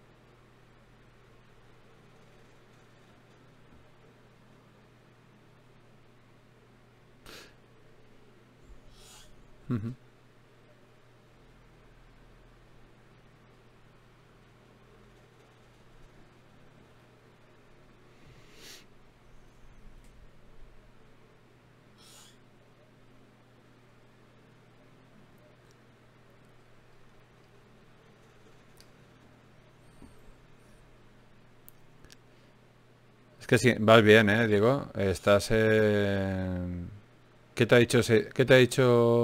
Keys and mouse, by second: 0.4 f, 1.6 click, 2.4 f, 3.2 f, 4.4 ctrl+Tab, 5.2 click, 6.0 g, 9.6-11.4 right drag, 10.8 g, 11.8 click, 12.0 right click, 12.0 g, 15.1 g, 17.2 g, 22.0-23.9 right drag, 24.6 Tab, 28.9 shift+d, 30.5 x, 33.1-34.1 right drag, 34.3 ctrl+d, 39.1 shift+d.